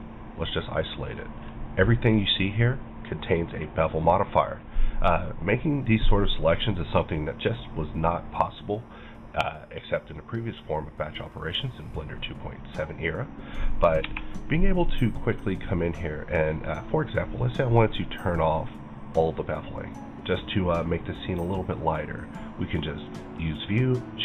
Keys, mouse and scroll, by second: 1.1 middle click, 1.4-2.2 scroll up 3, 2.2-7.8 middle drag, 7.5 scroll down 1, 7.8-15.9 middle drag, 15.9 right click, 17.2 click, 17.6 right click.